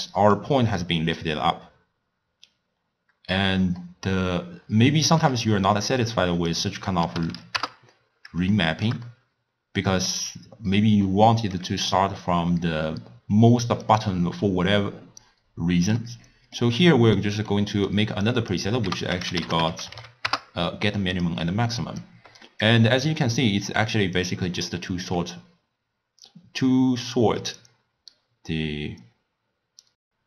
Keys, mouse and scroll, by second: 0.5 d, 1.0 d, 1.1 d, 2.8 scroll down 1, 2.8-3.8 scroll up 1, 3.8-6.6 shift+middle drag, 6.6 click, 7.3 0, 8.6-12.1 shift+middle drag, 12.9-13.6 scroll down 1, 13.6 d, 13.9-16.0 drag, 16.0 d, 16.3-18.3 middle drag, 18.3 click, 18.9 ctrl+a, 21.5 middle click, 22.1-24.3 drag.